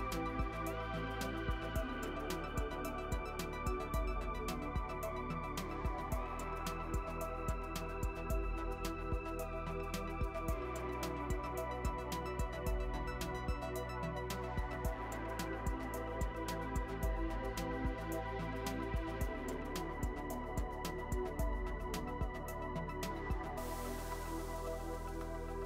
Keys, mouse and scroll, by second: 0.2 a, 0.8 s, 5.2 click, 6.5 g, 8.6-9.6 middle drag, 9.3 click, 9.8 KP_1, 10.7 click, 11.7 g, 14.3-15.8 middle drag, 15.8 click, 16.7 g, 20.3 click, 21.4 s, 23.6 ctrl+r, 25.2 middle click.